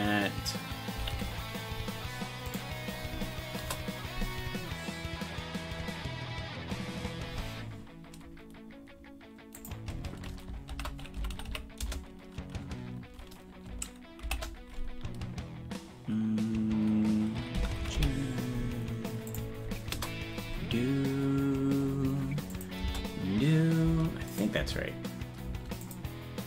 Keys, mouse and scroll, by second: 22.6 click, 22.8 space, 24.3 click, 24.6 space, 25.5 space, 25.9 click.